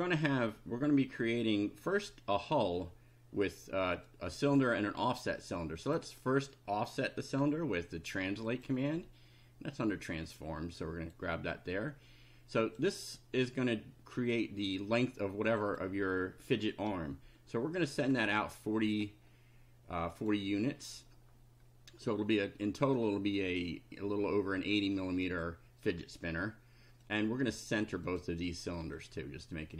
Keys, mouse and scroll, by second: 4.1 click, 5.2 click, 8.5 click, 9.9-11.3 drag, 11.5-13.0 drag, 14.7 click, 15.5 click, 17.8-18.6 typing, 20.1 click, 27.0 click, 28.1 click, 29.0 click.